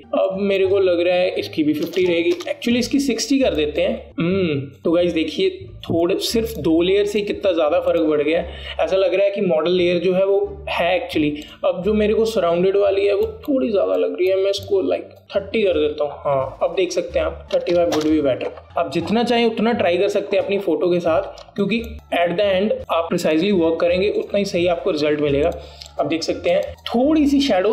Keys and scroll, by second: 2.9 KP_5, 3.3 KP_0, 3.5 Return, 18.6 Return, 22.2 alt+space.